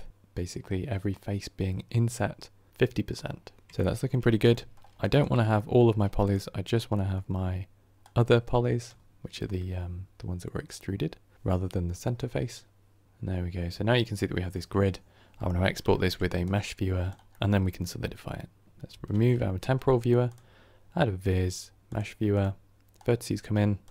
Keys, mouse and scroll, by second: 3.7-14.0 shift+middle drag, 18.8 x, 21.9 shift+a.